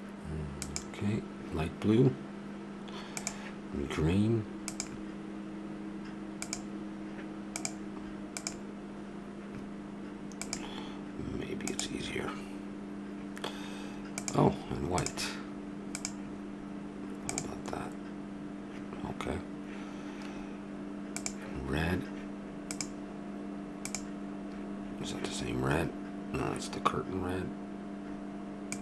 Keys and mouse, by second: 5.6-17.9 drag, 21.2-26.7 drag, 28.7-28.8 drag.